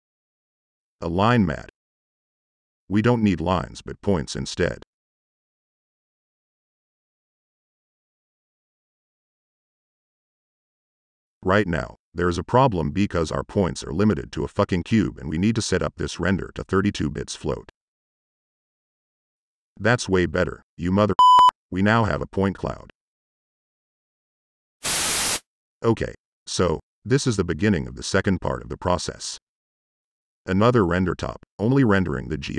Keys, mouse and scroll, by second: 0.0-1.0 typing, 1.6 drag, 4.9 click, 10.8 click, 11.7 click, 12.3 middle click, 12.7 right click, 12.9 click, 15.7 click, 20.4 middle click, 20.6 click, 21.1 click, 21.3 click, 22.2 right click, 22.3 middle click, 23.6 right click, 24.4 click, 26.1 click, 26.1 Tab, 26.7 e, 27.0 n, 27.5 click, 27.9 click, 28.8 click.